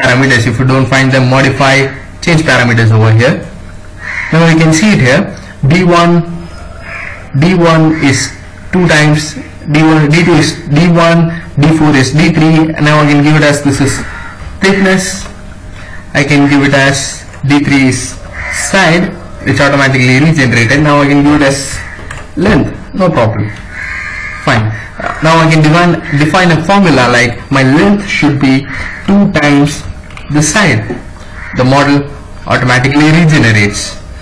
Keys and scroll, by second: 13.6 shift+t, 14.0 k, 14.7 Return, 17.4-18.8 typing, 21.3 shift+l, 21.6 Return, 28.3-30.2 typing, 31.7 Escape.